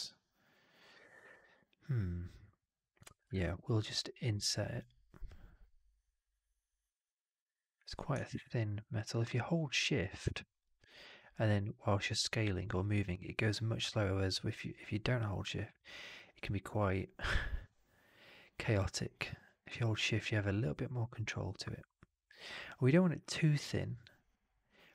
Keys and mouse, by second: 3.2 shift+Tab.